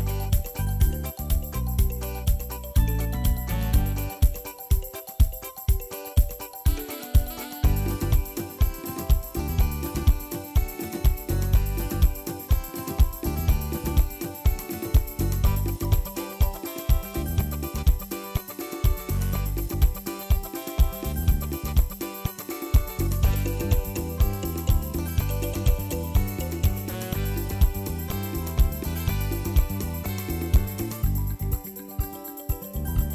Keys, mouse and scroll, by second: 0.2-1.2 shift+middle drag, 1.2-2.2 drag, 2.6 click, 3.1-4.5 drag, 4.5 scroll down 3, 4.6 middle click, 5.2 click, 6.0-6.5 shift+middle drag, 6.5 ctrl+s, 6.5-6.9 scroll up 2, 6.9-8.1 drag, 9.2 scroll up 4, 9.5-10.7 drag, 12.2 ctrl+s, 12.4-13.0 scroll up 3, 13.0 middle click, 13.2 click, 14.2-14.7 scroll down 1, 14.7-15.3 scroll down 6, 15.3 z, 15.7 scroll down 1, 15.9 shift+middle click, 16.1-17.7 drag, 17.9-18.8 drag, 19.0 click, 19.5 KP_Decimal, 19.8 shift+middle click, 20.1 shift+a, 21.3 click, 21.7 shift+middle click, 22.0 shift+a, 23.1 drag, 24.0-24.5 scroll up 2, 24.5 shift+middle click, 24.7 click, 24.9 ctrl+t, 25.7 ctrl+shift+click, 26.3-27.0 shift+middle drag, 27.0-28.7 drag, 29.0 click, 29.6 click, 30.7 click, 31.7-32.7 drag, 33.0 click.